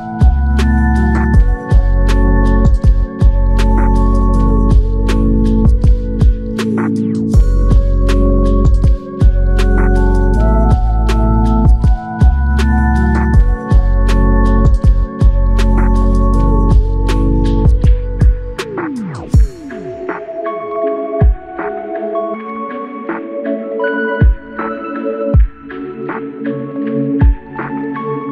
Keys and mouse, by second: 3.2 ctrl+i, 4.3 typing, 12.9 alt+m, 14.3-14.8 typing, 18.9 double click, 25.6 shift+click, 27.5 r.